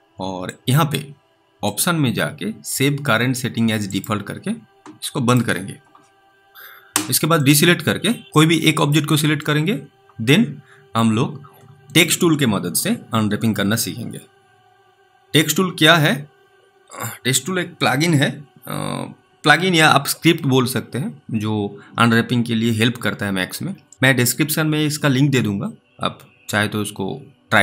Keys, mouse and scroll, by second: 0.7 click, 8.2 double click, 8.8 click.